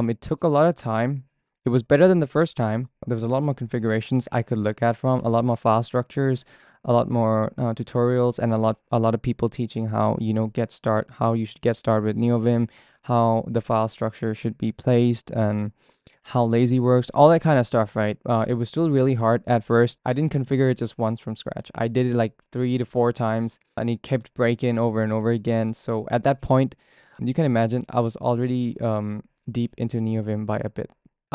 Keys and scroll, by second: 28.1-31.3 typing, 29.4 Return.